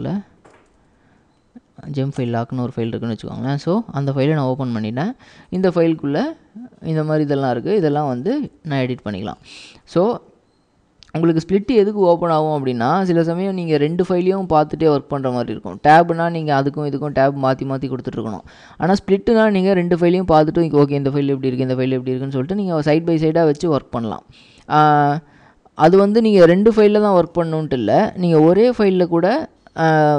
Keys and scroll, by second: 0.6 Tab, 0.8 Tab, 2.2 Return, 3.6-7.7 typing, 28.5 ctrl+w, 28.8 h.